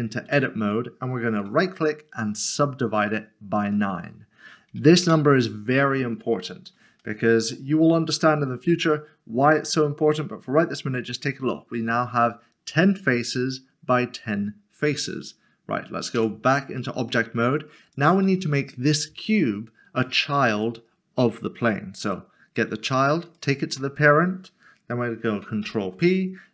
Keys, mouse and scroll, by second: 1.3 Tab, 2.4 click, 5.0 Return, 6.5 scroll up 1, 7.0 shift+middle click, 16.8 middle click, 17.9 click, 20.5 click, 22.9 s, 23.3 shift+click, 25.6 ctrl+p.